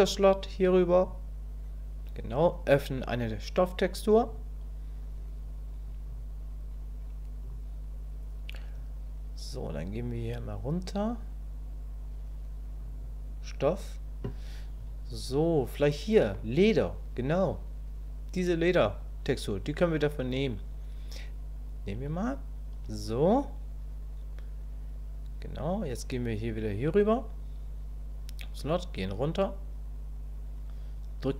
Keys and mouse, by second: 1.0 click, 4.3 click, 26.7 click.